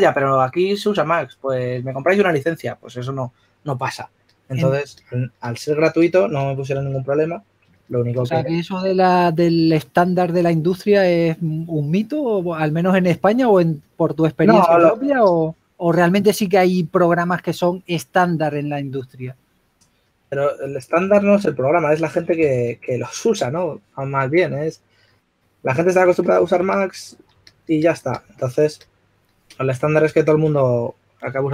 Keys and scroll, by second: 7.0-7.7 typing, 10.7-11.8 typing, 16.8-18.0 typing, 21.8 s, 23.0-23.8 typing, 29.9 s, 30.9 shift+f.